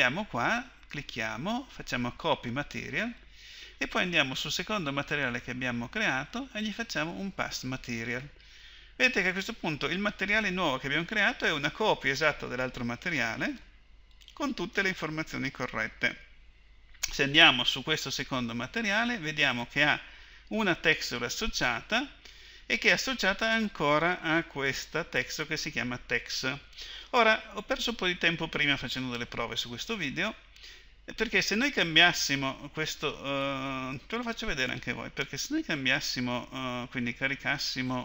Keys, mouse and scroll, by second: 4.4-9.1 drag, 13.1-16.1 drag, 19.4-23.1 drag, 37.9 click.